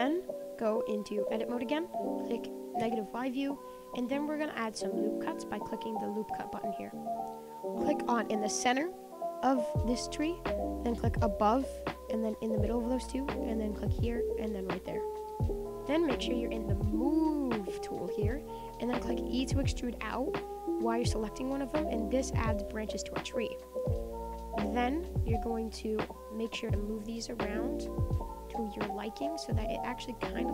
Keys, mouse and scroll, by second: 0.1 click, 0.4-1.3 middle drag, 1.3 Tab, 2.8 KP_1, 3.9-6.0 scroll down 4, 6.0-8.6 drag, 11.4 click, 12.3 click, 12.5 click, 13.9 click, 14.6 click, 18.1-19.3 drag, 19.3 e, 20.9 click, 21.0 e, 21.8 click, 21.8 e, 22.6 click, 22.7 e, 23.6-24.7 middle drag, 24.7 click, 24.8 shift+middle click, 25.4 click, 26.1 click, 26.5 click, 27.7 click, 28.9 click, 29.6 middle click, 29.7 Tab, 30.0-30.5 middle drag.